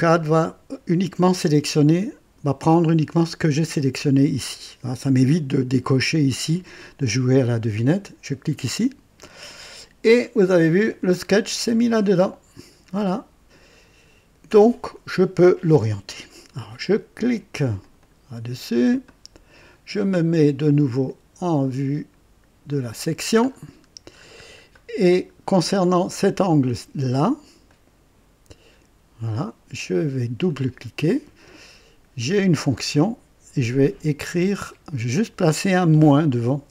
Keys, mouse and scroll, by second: 8.3 click, 10.1-10.5 scroll down 2, 17.8 click, 19.0 right click, 22.7 click, 23.4-24.5 scroll up 2, 24.7-25.5 right drag, 25.7 scroll up 1, 27.6-29.4 drag, 30.4 click, 32.1 click, 34.7 click, 36.5 -.